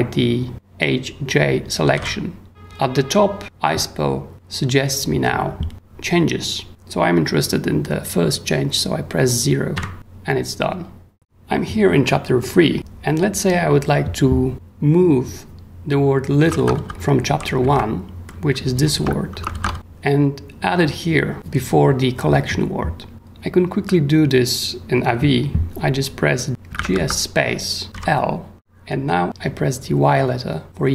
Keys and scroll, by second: 1.6-2.4 typing, 9.7 0, 16.4-19.3 typing, 16.5 ctrl+w, 19.4 ctrl+shift+8, 19.5 ctrl+shift+w, 20.4 w, 26.2-27.9 typing.